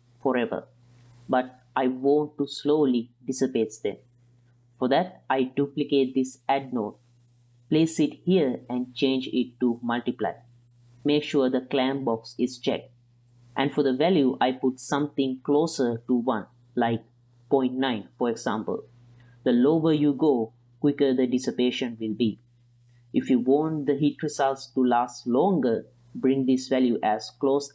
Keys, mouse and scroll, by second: 1.1-1.6 middle drag, 2.2-2.6 ctrl+middle drag, 4.4 middle drag, 4.8 click, 5.3 click, 5.6 drag, 6.0 click, 6.3 shift+d, 8.1-9.5 drag, 10.1-17.7 drag, 18.9 ctrl+click, 22.7-23.7 drag.